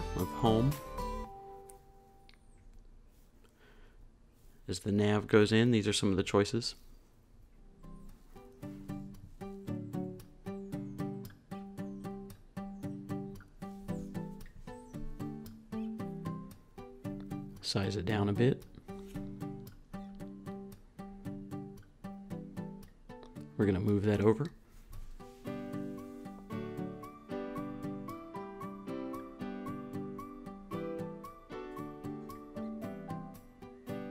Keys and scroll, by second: 1.2 space, 1.9 space, 3.1 super+c, 3.7-12.1 typing, 14.3 shift+Left, 16.2 shift+Left, 16.9 shift+Left, 18.3 Down, 24.3 shift+Right, 26.3 Up, 29.5-31.8 typing.